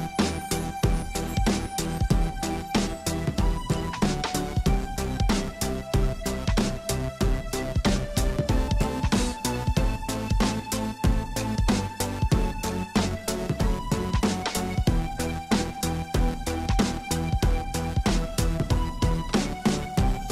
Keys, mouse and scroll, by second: 7.3 i, 7.9 space, 14.8 click, 15.0 space.